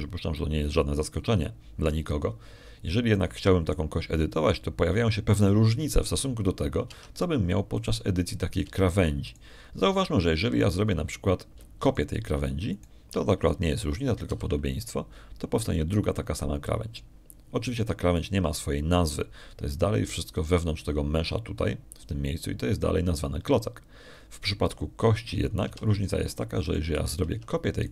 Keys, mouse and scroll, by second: 5.0 shift+click, 8.8 Tab, 9.6 click, 10.5 Tab, 11.2 click, 13.7 shift+click, 14.6 shift+right click, 16.2 shift+d, 17.4 click, 27.5 Tab.